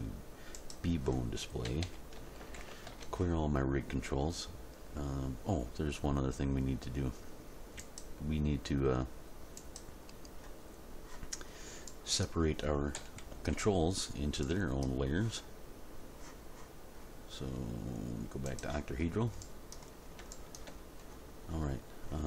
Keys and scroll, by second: 1.7 a, 2.4 alt+r, 2.6 alt+g, 2.9 alt+s, 13.0 End, 13.3 Page_Down, 13.6 End.